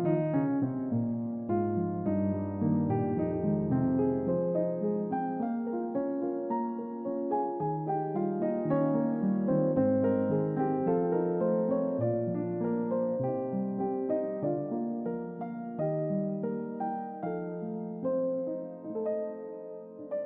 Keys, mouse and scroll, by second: 0.0 scroll down 1, 0.2 middle click, 1.5-2.1 scroll down 2, 2.4 middle click, 2.8 click, 3.9 click, 4.8 click, 5.5-6.3 drag, 6.7 click, 7.3 middle click, 7.9 ctrl+middle click, 10.0-10.6 scroll up 1, 12.2-19.1 drag.